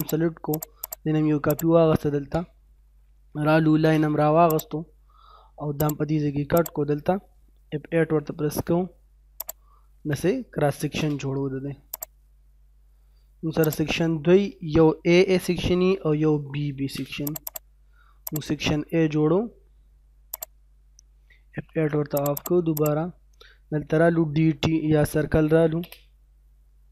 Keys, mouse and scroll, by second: 0.5 right click, 0.8 click, 2.3 scroll up 1, 2.6 middle click, 3.6 l, 3.8 space, 4.5 click, 8.2 F8, 8.5 scroll up 1, 9.4 click, 10.8 l, 11.0 space, 12.0 click, 15.4-17.4 typing, 17.3 click, 17.9-18.3 scroll down 1, 18.3 right click, 20.3 click, 21.6 F8, 22.2 click, 22.3 right click, 22.5-24.3 typing, 22.8 click, 23.4 middle click, 25.6 c, 25.8 space, 26.1 scroll up 1.